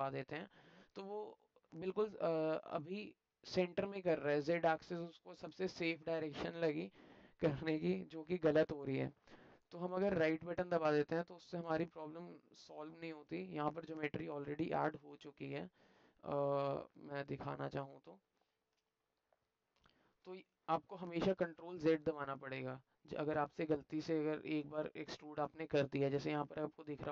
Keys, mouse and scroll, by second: 11.7-12.7 alt+middle drag, 12.7 alt+click, 17.1 click, 20.4 alt+click, 22.0 middle click, 22.1 alt+click, 23.2 middle click, 23.3 alt+click, 25.7 alt+middle click.